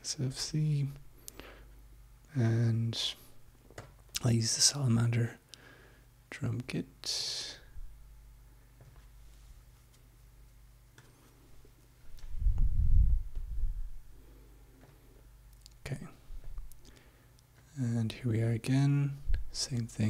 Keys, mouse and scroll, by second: 0.2 click, 2.7 click, 3.8 click, 7.3 click, 8.8 click, 11.0 click, 14.8 click, 16.4-17.8 drag, 18.9 click.